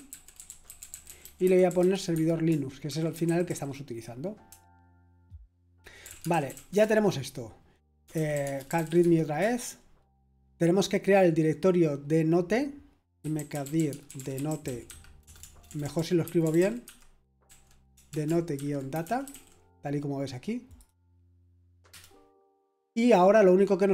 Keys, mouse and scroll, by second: 0.0-9.4 typing, 12.9-19.8 typing, 20.7 click, 21.9 typing.